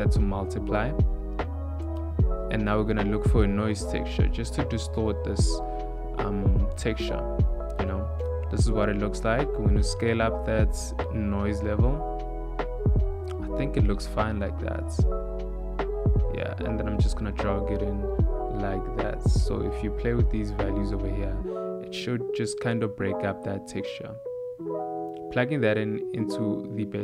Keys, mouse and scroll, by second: 25.8 click.